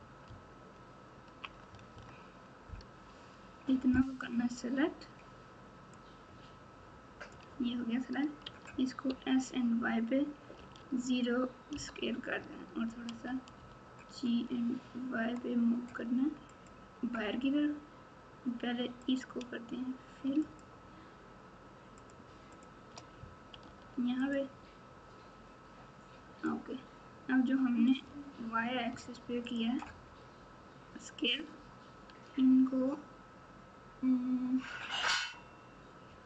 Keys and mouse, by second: 0.2 ctrl+KP_6, 0.7 ctrl+KP_6, 1.6 KP_Add, 1.9 KP_Add, 5.9-7.3 drag, 8.4 s, 13.1 g, 19.0 click, 20.4 shift+click, 21.9 shift+click, 22.5 shift+click, 23.6 f, 26.5-27.9 drag, 29.5 shift+click.